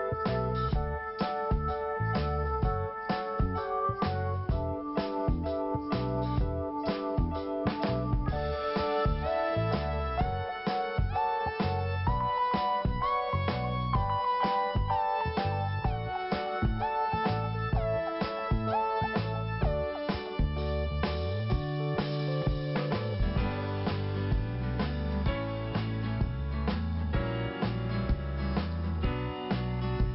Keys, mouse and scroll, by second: 5.3 alt+p, 5.5 alt+p, 6.9 click, 14.2 scroll up 1, 15.5 click, 27.3 scroll down 1, 28.5 click.